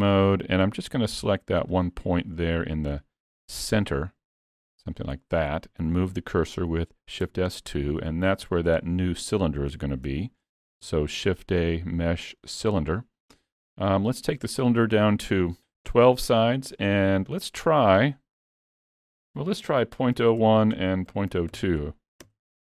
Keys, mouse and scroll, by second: 0.1 middle click, 0.7 1, 1.8 click, 2.7-3.1 scroll up 4, 3.1 shift+middle click, 3.5 middle click, 4.1 click, 4.9 click, 5.8 shift+s, 7.3 Tab, 7.5-8.7 scroll down 3, 7.9 middle click, 8.8 shift+middle click, 9.3 middle click, 9.8 alt+a, 10.2 shift+middle click, 10.8 shift+a, 14.2 click, 18.9 click.